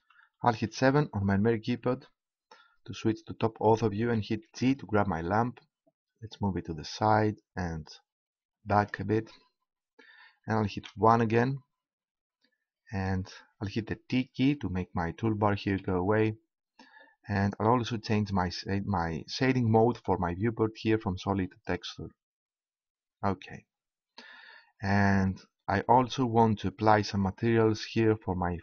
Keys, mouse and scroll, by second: 0.5 KP_7, 4.5 g, 8.9-10.7 drag, 10.7 KP_1, 11.5-12.7 drag, 15.8 t, 19.8-22.1 drag.